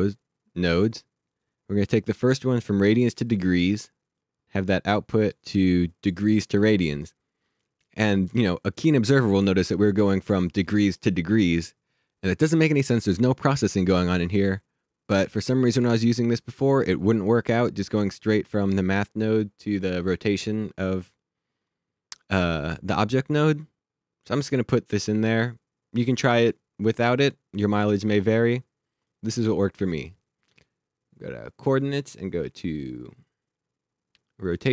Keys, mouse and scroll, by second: 4.2 click, 5.7 click, 17.4 click, 27.6 click.